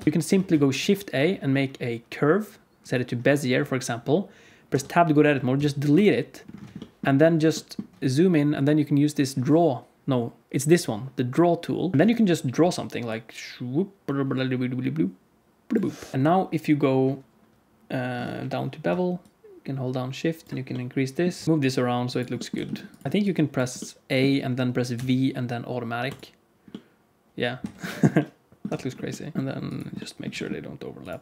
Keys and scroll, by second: 0.4 shift+a, 4.6 Tab, 5.5 x, 16.1 Tab, 21.3 Tab, 21.4 KP_Decimal, 21.4 g, 22.4 g, 23.0 g, 24.9 v, 27.5 Tab, 28.6 Tab, 29.3 g, 30.2 g.